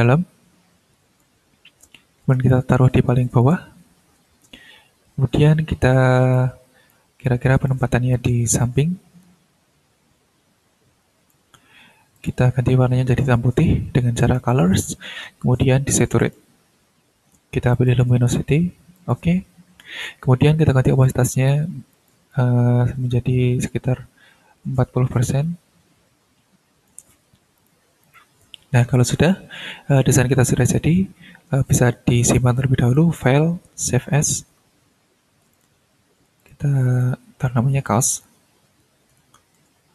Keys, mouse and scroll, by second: 2.5 click, 6.3-7.1 drag, 7.2-7.8 drag, 8.1-11.5 drag, 12.1 click, 14.2 click, 16.2 click, 17.7 click, 18.9 click, 21.3 click, 21.9 click, 22.3-27.1 drag, 27.5 click, 28.0 click, 32.8 click, 34.0 click, 35.5 click, 36.4 click, 37.0 click, 38.2-39.7 typing.